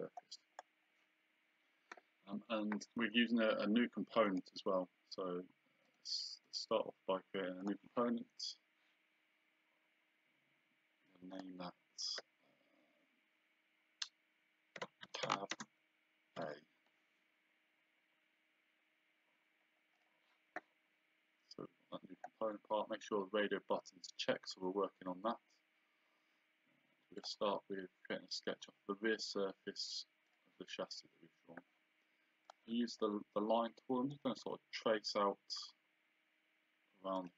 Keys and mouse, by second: 4.3 click, 5.9 right click, 7.6 click, 11.1 click, 14.6-16.4 typing, 20.0 click, 27.2 click, 30.3 click, 32.5 click, 34.1 click, 37.2 click.